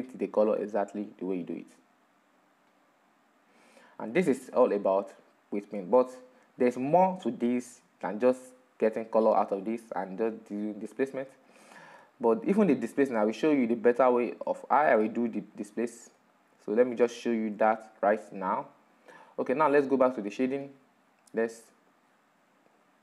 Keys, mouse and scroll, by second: 1.8-5.7 drag, 8.6 click, 9.4-10.5 middle drag, 10.5-11.1 scroll down 2, 11.1-18.4 middle drag, 18.4-18.9 scroll up 3, 18.9-19.6 middle drag, 19.6-20.3 scroll down 2, 20.3-23.0 shift+middle drag.